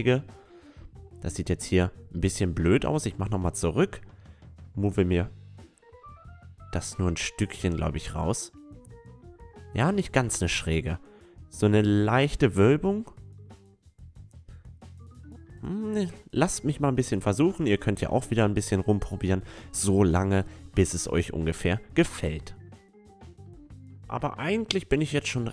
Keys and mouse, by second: 2.0 ctrl+z, 3.0 middle click, 3.1 Tab, 3.3 middle click, 4.6-6.4 drag, 4.6-5.8 right drag, 6.0-7.8 right drag, 6.6-7.7 drag, 7.5 Tab, 8.5-9.9 middle drag, 12.5 Tab, 12.7 middle click, 13.6-15.4 drag, 15.6-17.3 right drag, 16.2-18.1 drag, 17.7 middle click, 18.1 middle click, 18.6 Tab, 19.2 Tab, 20.0-21.8 drag, 21.6 Tab, 21.9-23.1 middle drag, 23.3 Tab, 24.0 right click, 24.6 a, 25.4 s.